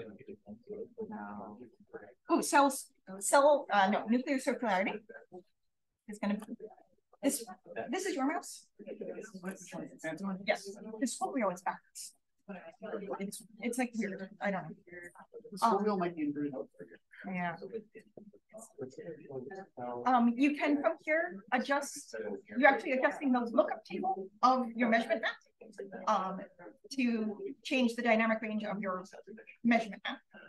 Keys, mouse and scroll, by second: 3.7-5.3 scroll up 1, 5.3-5.9 scroll up 1, 5.9 click, 5.9-9.4 scroll up 1, 7.3-9.4 drag, 14.3-14.9 scroll up 2, 17.5-18.0 drag, 18.9-21.5 scroll up 2, 21.5 click, 26.1-30.4 drag.